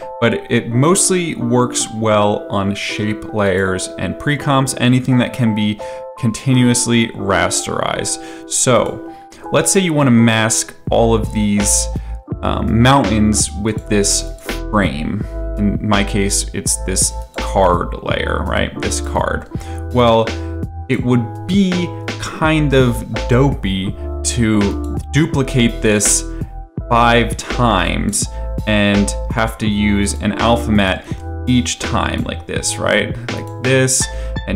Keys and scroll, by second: 26.8 ctrl+d, 31.0 ctrl+d.